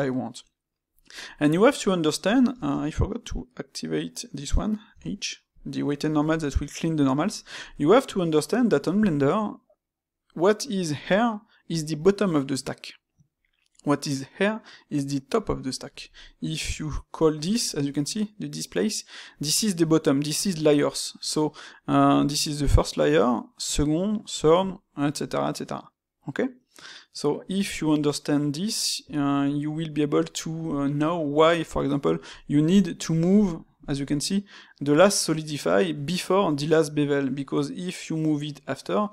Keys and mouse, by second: 2.5 space, 16.5 ', 29.0 Escape, 29.5-36.4 middle drag.